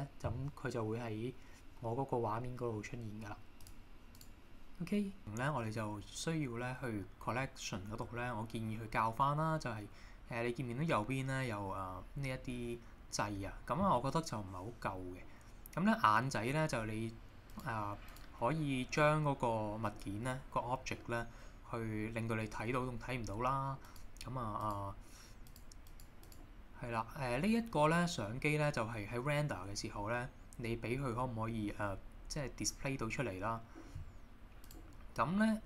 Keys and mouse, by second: 4.2 click, 17.5 click, 18.1 click, 23.8 click, 24.6 click, 25.5 click, 25.9 click, 26.3 click, 34.7-35.6 drag.